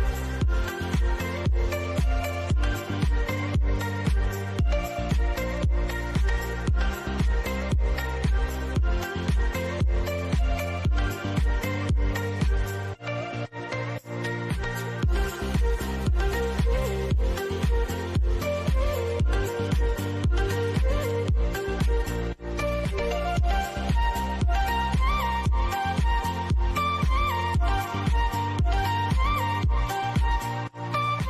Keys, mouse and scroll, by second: 5.1 click, 9.4 scroll down 1, 10.6-12.2 shift+middle drag, 12.2 scroll up 1, 13.1 middle click, 14.0 scroll down 1, 15.4 click, 19.5 click, 21.8 click, 25.2 scroll down 1, 25.9 middle click, 26.3 scroll up 1, 27.9 click, 28.9-29.3 scroll up 1, 30.8-31.2 middle drag.